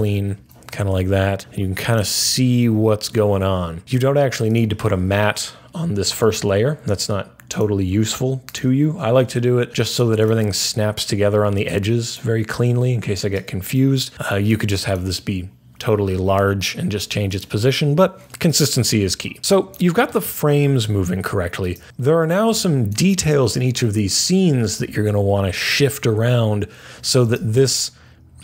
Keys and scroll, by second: 0.9 super+a.